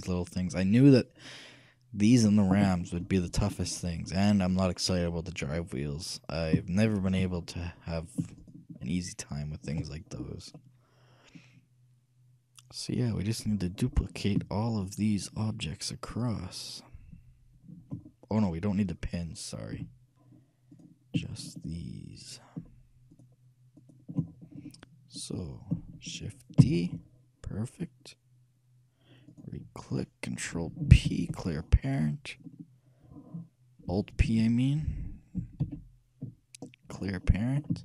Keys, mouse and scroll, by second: 0.0 shift+KP_3, 3.2-5.8 middle drag, 6.9-10.4 shift+right drag, 10.8-12.6 shift+middle drag, 13.9-15.3 middle drag, 15.3-18.1 shift+right drag, 18.3 middle click, 19.2-20.2 scroll down 1, 19.9 a, 20.2-20.9 scroll up 1, 20.9-25.8 right drag, 26.8 shift+d, 31.2 ctrl+p, 35.8 alt+p, 37.7-37.8 alt+middle drag.